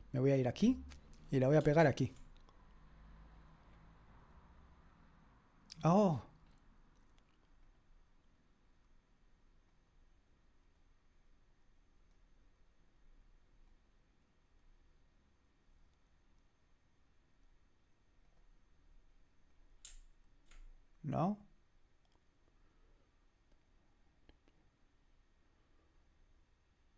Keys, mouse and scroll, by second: 0.4 click, 1.9 ctrl+v, 4.2 click, 5.8-6.5 scroll down 1, 6.5-7.6 scroll up 1, 7.6 click, 9.7 click, 12.1 click, 13.7 click, 18.2 click, 19.5 click, 21.2 click, 25.8 click.